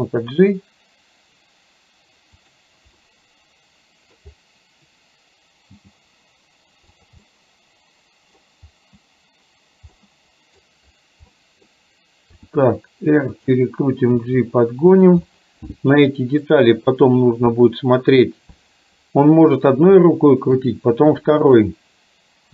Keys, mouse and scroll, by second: 3.1-5.7 middle drag, 5.7 g, 7.4-8.5 middle drag, 10.1 middle click, 11.3 middle click, 12.5 r, 14.2 g, 15.5-16.5 middle drag, 20.2 shift+middle click, 21.5 click.